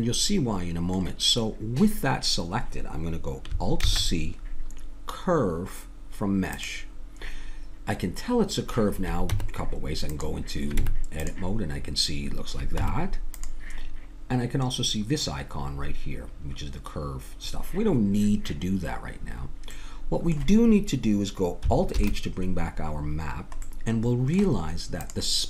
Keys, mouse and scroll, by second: 3.8 alt+c, 9.3 Tab, 10.8 Tab, 12.8 Tab, 19.2 middle click, 21.9 alt+h, 21.9-23.7 middle drag, 25.0-25.4 drag.